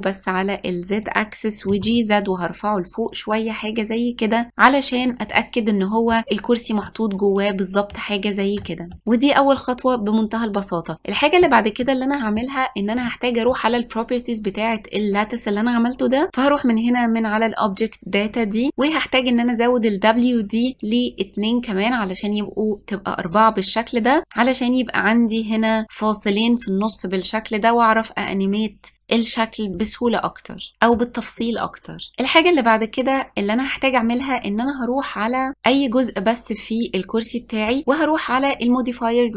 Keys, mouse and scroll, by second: 1.8 g, 5.5-9.0 middle drag, 9.0 scroll up 1, 11.9-16.2 middle drag, 17.8 click, 20.5-23.9 drag, 30.7-32.1 middle drag, 35.7 click, 38.4 drag.